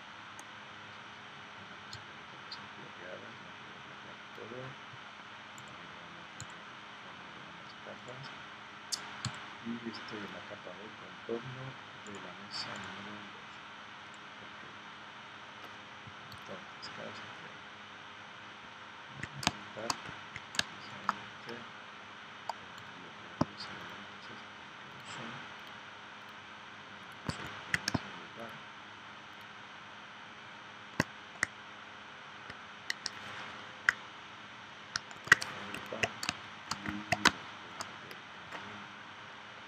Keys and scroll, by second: 19.5 space, 20.6 space, 35.1 super+g, 36.3 space, 37.2 space.